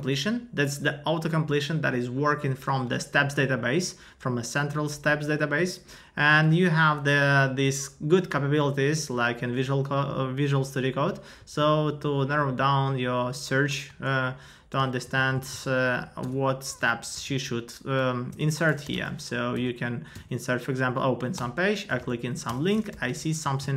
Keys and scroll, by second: 11.4 Down, 13.9 Return, 14.9 super+Left, 15.1 Right, 15.8 Left, 17.3 super+Right, 18.3 Return, 19.5 Down, 20.1 Up, 21.4 Return, 22.1 Right, 22.4 Return, 23.4 Down.